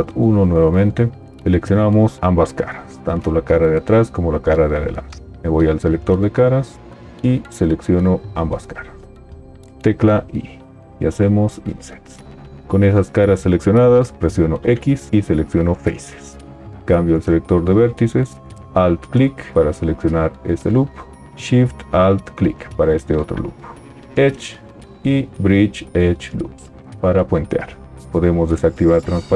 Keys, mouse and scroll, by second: 9.8 i, 14.7 x, 18.7 alt+click, 21.4-23.3 alt+shift+drag.